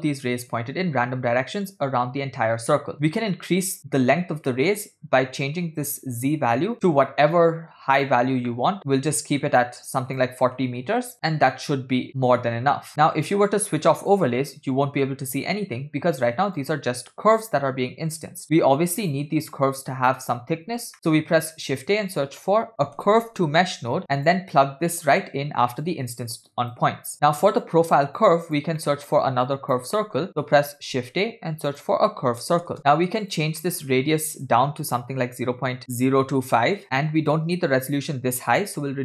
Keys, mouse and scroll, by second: 3.2 middle click, 4.6 middle click, 6.3-8.1 drag, 10.1-11.1 drag, 11.1-11.5 scroll down 2, 11.7-13.0 middle drag, 14.0 click, 16.5 click, 17.4 click, 18.1 click, 19.0 click, 21.0 middle click, 21.2 shift+a, 26.3 click, 27.2 middle click, 27.2 scroll down 3, 27.7-28.0 drag, 28.2 click, 29.0 middle click, 29.5 click, 30.2 middle drag, 30.3-30.9 scroll up 1, 31.1 shift+a, 33.8 middle click, 34.0-34.4 scroll up 2, 34.4-36.8 drag, 35.7 0, 37.3-39.0 drag.